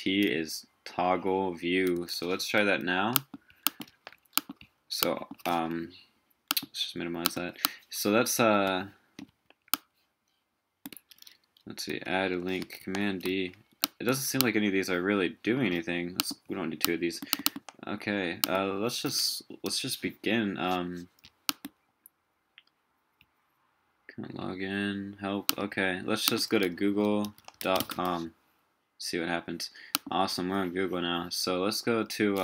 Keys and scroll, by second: 2.4 super+t, 3.9 super+t, 9.3 super+t, 11.9 super+d, 12.8 super+d, 13.3 super+d.